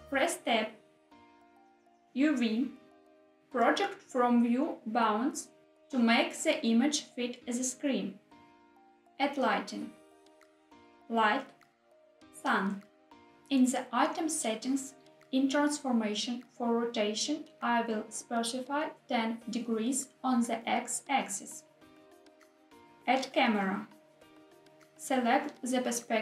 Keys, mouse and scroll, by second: 0.5 Tab, 2.8-4.8 drag, 8.2 Tab, 9.2 shift+a, 18.0 click, 20.1-22.0 drag, 23.3 shift+a, 25.0-26.2 middle drag.